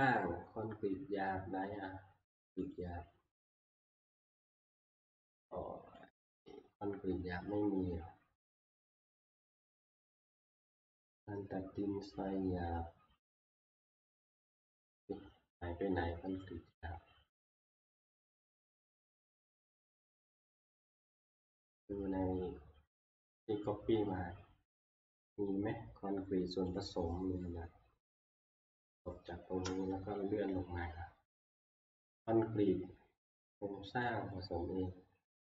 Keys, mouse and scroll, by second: 2.8 click, 6.2 click, 8.8 click, 8.8-9.1 scroll, 10.9 click, 13.6 click, 17.9 click, 19.6 click, 20.9 click, 23.5 click, 26.8 click, 29.0 click, 29.9 Down.